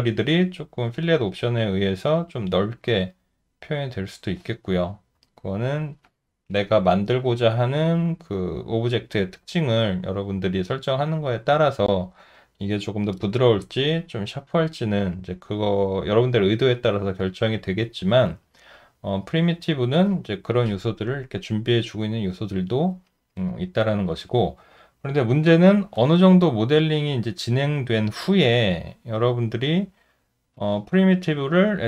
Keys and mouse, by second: 25.0 Delete, 26.8 alt+right click, 28.1 alt+click, 28.8 alt+middle click, 29.4 alt+right click.